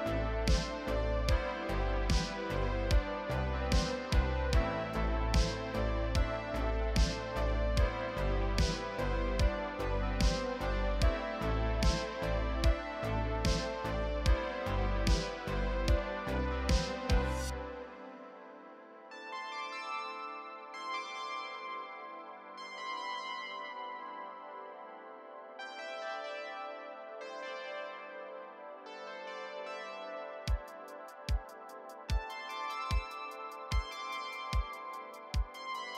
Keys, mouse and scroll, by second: 0.0 middle click, 0.0 scroll down 1, 0.3 middle click, 0.4 scroll up 2, 0.6 shift+middle click, 0.8 middle click, 0.8-4.7 typing, 0.9 middle click, 1.1 middle click, 1.1 scroll down 1, 1.3 middle click, 1.5 middle click, 2.2 Tab, 2.3 shift+middle click, 2.3 shift+scroll down 1, 2.4 scroll up 9, 2.4 shift+middle click, 2.6 click, 3.0-3.5 scroll down 2, 3.1 middle click, 3.4 shift+middle click, 3.5 shift+middle click, 3.7 scroll up 3, 3.7 click, 4.3 middle click, 4.4 click, 4.5 shift+middle click, 4.5 Tab, 4.6 middle click, 5.9 middle click, 5.9 scroll up 2, 6.0 KP_7, 6.1 scroll down 3, 6.5 scroll up 1, 7.2 shift+middle click, 7.3 click, 7.4 z, 7.4 middle click, 7.7-8.1 scroll down 2, 7.8 Tab, 7.9 middle click, 8.0 KP_7, 8.1 z, 8.2 shift+middle click, 8.2 scroll up 4, 8.5 shift+click, 8.6 shift+middle click, 8.6 scroll down 1, 8.8 z, 9.2 shift+middle click, 9.3-9.7 scroll up 1, 9.7 shift+middle click, 9.9 scroll down 4, 9.9 shift+middle click, 10.0-11.1 scroll up 3, 10.1 alt+a, 10.3 shift+middle click, 11.1-12.6 typing, 11.6 scroll down 1, 11.6 middle click, 11.7 click, 12.6 middle click, 12.8 scroll down 1, 12.8 middle click, 13.0 click, 13.0 middle click, 13.0 scroll up 1, 13.1 middle click, 13.2 click, 13.3 scroll down 1, 13.3 click, 13.6 middle click, 13.7 middle click, 13.8-14.3 scroll up 2, 13.8 middle click, 14.1 shift+click, 14.2 middle click, 14.4 middle click, 14.4 scroll down 1, 14.6 middle click, 14.7 click, 14.8 alt+a, 14.9 middle click, 15.0-19.8 typing, 15.5-16.1 scroll down 1, 16.1 shift+middle click, 16.2 middle click, 16.6 middle click, 17.0 scroll down 4, 17.0 alt+a, 17.1 middle click, 17.4-17.7 scroll up 5, 17.4 shift+middle click, 17.9-18.2 scroll down 2, 18.1 middle click, 18.3 click, 18.4 scroll up 1, 18.5 middle click, 18.6 click, 19.1 middle click, 20.8 shift+middle click, 20.8 scroll up 2, 22.8 scroll up 1, 22.8-26.1 typing, 23.1 shift+middle click, 23.2 alt+click, 23.6 shift+middle click, 24.1 scroll down 7, 24.2 shift+middle click, 24.7 middle click, 24.8 middle click, 24.9 scroll up 1, 24.9 alt+click, 25.0 middle click, 25.3 middle click, 25.4 scroll up 1, 25.6 shift+middle click, 25.8 middle click, 26.1 scroll down 3, 26.6 middle click, 26.8-27.1 scroll down 7, 26.9 middle click, 27.0 middle click, 27.1 click, 27.2-28.7 typing, 27.3 Tab, 27.6 scroll up 3, 27.7 middle click, 27.9 middle click, 27.9 scroll down 1, 28.0 middle click, 28.2-29.1 scroll up 4, 28.6 Tab, 28.6 middle click, 28.9 Tab, 29.0 shift+middle click, 29.2 scroll down 1, 29.3 shift+middle click, 29.5 scroll up 2, 29.6 shift+middle click, 29.9 click, 30.3-32.6 typing, 30.4 scroll up 1, 30.5 shift+middle click, 30.7 scroll down 3, 30.7 shift+middle click, 30.8 scroll up 1, 30.8 scroll down 2, 30.9 shift+middle click, 31.2 middle click, 31.3 shift+middle click, 31.3 scroll up 2, 31.5 shift+middle click, 31.7 middle click, 31.8 right click, 31.9 Tab, 32.2 right click, 34.2 scroll up 1, 34.3 scroll down 1, 34.3 g, 34.9 shift+middle click, 34.9 scroll down 3, 35.2 shift+middle click, 35.2 scroll up 6.